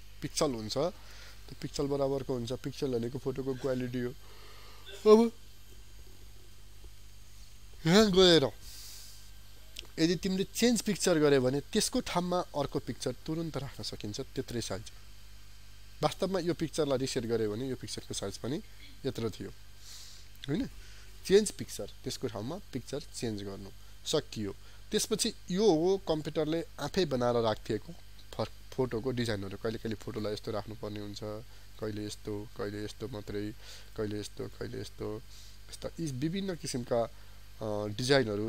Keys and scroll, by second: 19.8 ctrl+z.